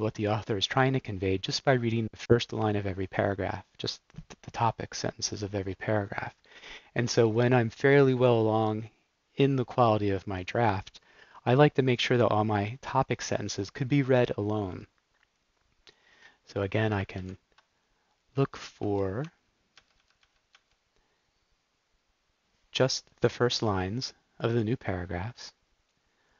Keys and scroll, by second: 16.3 Up, 17.3 super+f, 18.3 Down, 18.7 Down, 19.1 Down, 19.7 Up, 20.4 Up.